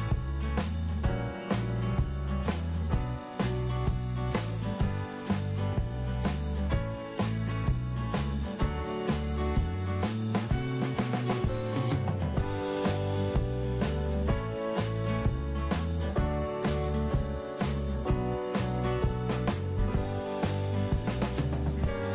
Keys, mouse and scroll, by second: 1.9 scroll down 1, 5.6 click, 7.3-7.9 scroll up 1, 8.4-8.8 scroll down 1, 12.0 click, 20.0 Return.